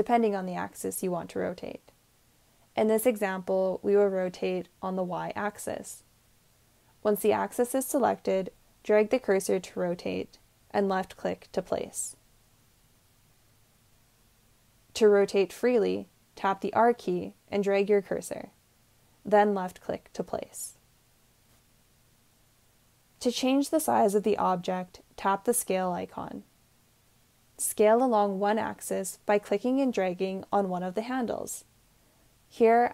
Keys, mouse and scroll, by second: 9.4-12.3 drag, 17.3 r, 20.7 click.